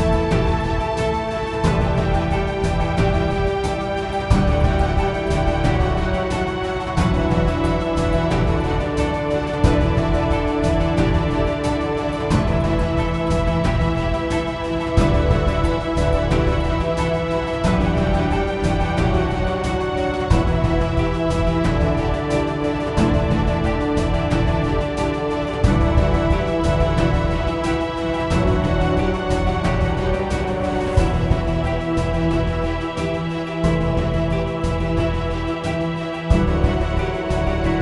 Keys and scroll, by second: 1.9-5.5 typing, 7.0 Return, 9.9-12.7 typing, 13.3 Up, 13.3 Return, 26.7-32.0 typing.